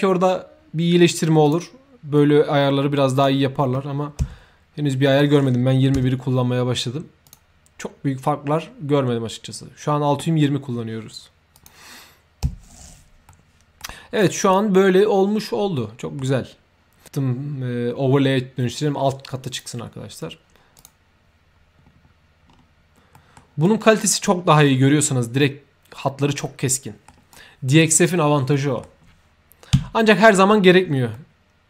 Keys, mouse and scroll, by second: 1.4 click, 3.1 click, 4.9 drag, 7.2 click, 11.5 click, 13.2 middle click, 14.1 click, 15.7 middle click, 19.4 click, 20.7 click, 21.8 shift+s, 22.4 middle click, 22.6 s, 23.1 middle click, 23.6 right click, 24.2 middle click, 26.4-27.0 middle drag, 27.3-27.6 right drag, 28.5 middle click, 29.8 2, 31.1 middle click.